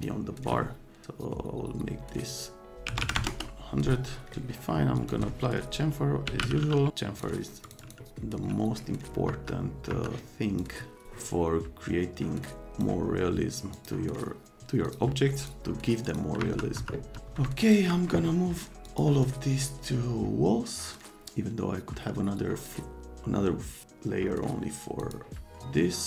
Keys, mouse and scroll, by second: 2.3 click, 2.8 KP_1, 2.9 KP_0, 3.1 KP_0, 3.3 KP_Enter, 4.9 click, 6.0-6.8 typing, 6.9 click, 7.6 click, 7.8 click, 9.2 F3, 9.9 F3, 10.6 middle click, 12.7 middle click, 13.7 middle click, 14.8 middle click, 15.4 click, 16.1 click, 16.4 F3, 16.8 F3, 17.1 F3, 17.6 click, 18.8 click, 25.0 click.